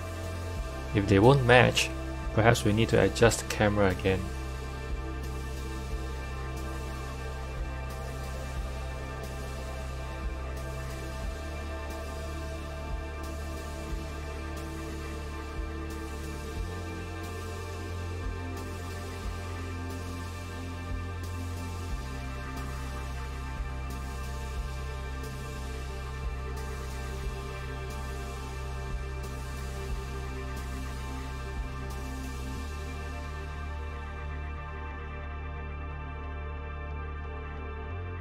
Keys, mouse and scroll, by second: 0.3 Tab, 0.8 click, 1.4-2.1 scroll up 5, 2.1-4.0 shift+middle drag, 4.0 r, 8.5-13.1 drag, 10.0 r, 18.7 g, 23.2 r, 28.8 r, 36.0 click, 37.0 s.